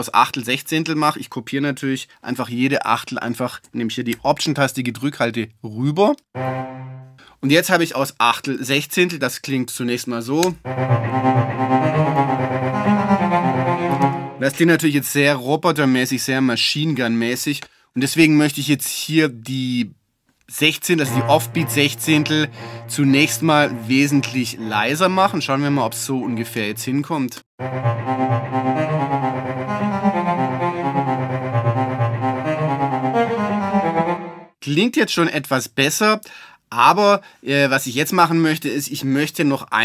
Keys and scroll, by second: 10.4 space, 14.0 space, 14.8 alt+space.